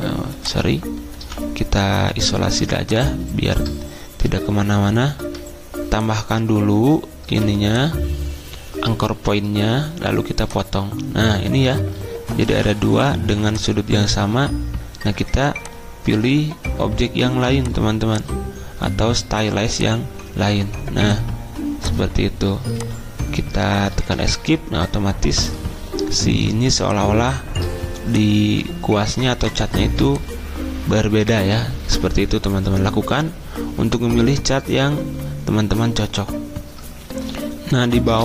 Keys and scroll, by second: 1.2 v, 5.2 =, 7.3 a, 12.5 v, 23.9 Escape.